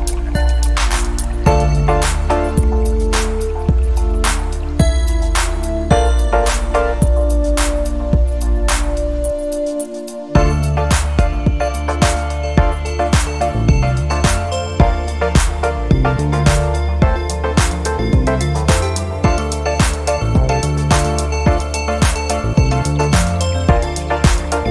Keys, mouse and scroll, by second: 0.1-1.4 drag, 2.8 click, 3.3-4.9 typing, 5.9 click, 7.2-9.3 drag, 9.9-15.1 drag, 16.1 click, 16.5 click, 16.9-18.2 drag, 18.5 scroll down 1, 21.2 ctrl+click, 21.7 ctrl+click, 22.2 ctrl+scroll up 2, 22.8 ctrl+scroll up 2.